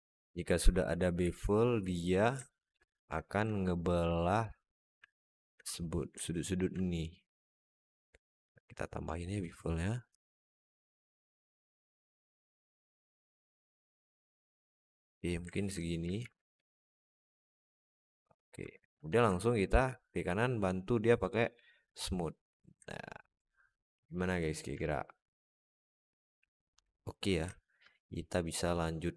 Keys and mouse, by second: 0.2 alt+shift+middle click, 1.0 z, 2.3 alt+shift+middle click, 3.1 alt+shift+middle click, 4.0 alt+shift+middle click, 4.4 alt+shift+middle click, 4.9 alt+middle click, 6.1 alt+shift+middle click, 8.2 click, 9.9-14.7 shift+drag, 15.4 alt+z, 16.0 alt+z, 18.5 Tab, 18.8 Tab, 19.1 Tab, 22.7-23.6 alt+middle drag, 23.8 alt+shift+middle drag, 24.7-26.9 middle drag, 27.4 alt+shift+middle drag, 27.7-29.0 alt+middle drag.